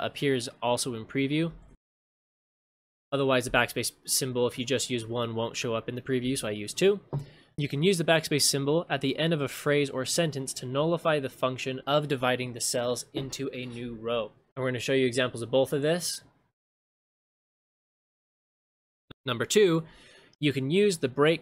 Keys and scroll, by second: 1.7 ctrl+shift+space, 6.4 ctrl+shift+space, 17.0 ctrl+c, 18.4 ctrl+v.